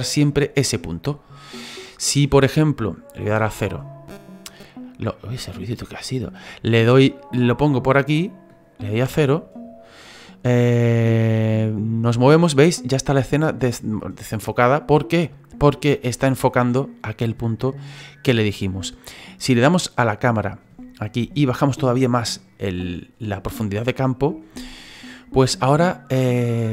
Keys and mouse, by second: 0.7 click, 3.2 KP_0, 5.3 right click, 7.1 click, 9.0 KP_0, 11.5 click, 12.6 click, 13.5 click, 19.5 click, 21.7 click, 26.2 click.